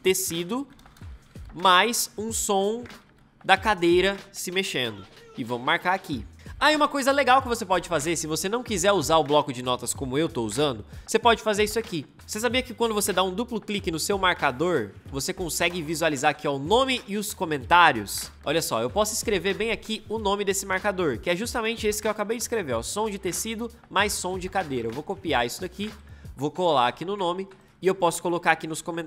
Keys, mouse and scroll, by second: 0.0-1.7 typing, 2.7-4.1 typing, 5.3 m, 24.0 ctrl+c, 25.9 click, 26.6 ctrl+v.